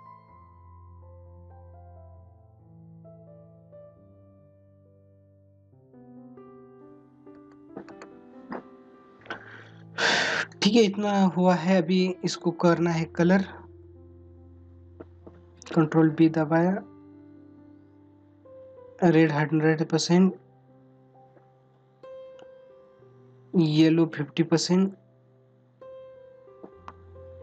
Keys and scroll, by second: 7.3 ctrl+alt+z, 9.7 ctrl+-, 14.1 ctrl+=.